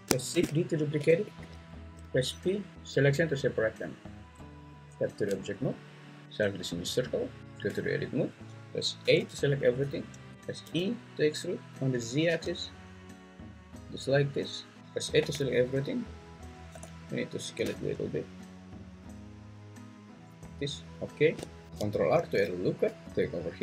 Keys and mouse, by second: 0.3 shift+d, 1.2 Escape, 1.9 p, 4.3 Tab, 7.4 Tab, 9.0 a, 10.3 `, 10.6 e, 12.3 z, 14.8 a, 15.2 a, 16.7 s, 21.0 shift+click, 21.7 ctrl+z, 22.2 ctrl+r.